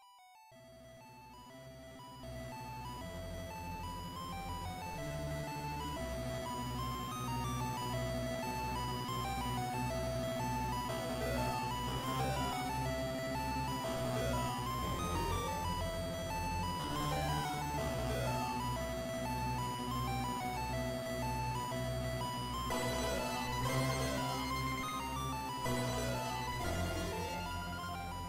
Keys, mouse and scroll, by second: 3.7 KP_1, 5.1-5.8 scroll down 1, 5.8-6.2 scroll down 1, 6.2 z, 7.5 shift+middle click, 10.5 middle click, 15.1 right click, 17.3 right click, 19.8 click, 21.7 click, 22.6 right click, 24.8 Tab, 26.1 KP_1.